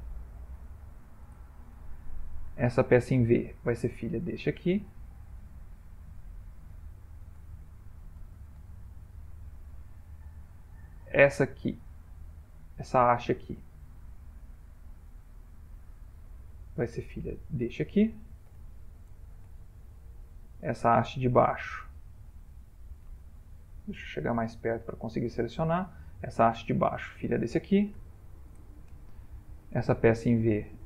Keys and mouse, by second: 0.6 ctrl+p, 2.7 click, 3.2 middle click, 4.2 shift+click, 5.2 click, 6.1 shift+click, 7.4 ctrl+p, 9.3 middle click, 9.4 middle click, 9.6 middle click, 10.7 click, 11.8 click, 12.8-13.3 middle click, 13.2 middle click, 14.5 click, 15.6 click, 16.4 middle click, 16.7 ctrl+middle click, 17.3 shift+click, 17.4 shift+click, 18.7 ctrl+p, 20.7 click, 21.8 click, 23.2 middle click, 24.3 ctrl+middle click, 25.6 click, 26.9 shift+click, 28.0 ctrl+p, 29.8 click, 30.6 shift+click.